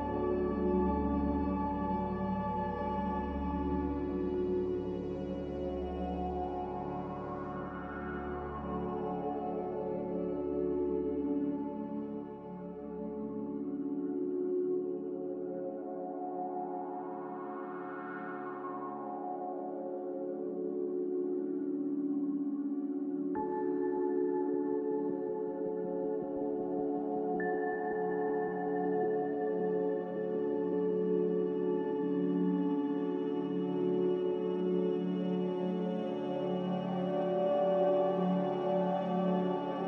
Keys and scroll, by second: 2.3 a, 7.5-9.0 typing, 12.2 q, 16.6 q, 25.8 a, 25.8 z, 29.4-29.9 typing, 30.2 Return, 31.1 3, 31.1 0, 36.3 1, 36.3 0, 36.7 Return.